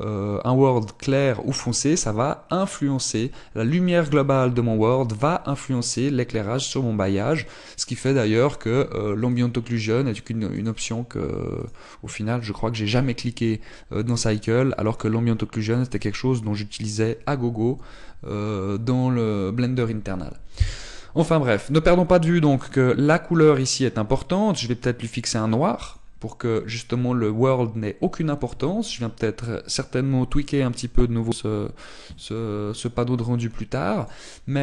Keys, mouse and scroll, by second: 10.1 click, 11.4 click, 12.4 click, 23.6 click, 24.3 click.